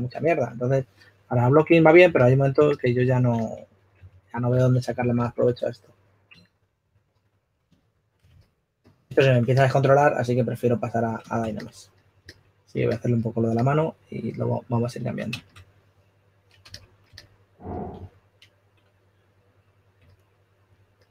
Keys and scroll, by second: 5.2-6.6 typing, 16.7 s, 19.7 4.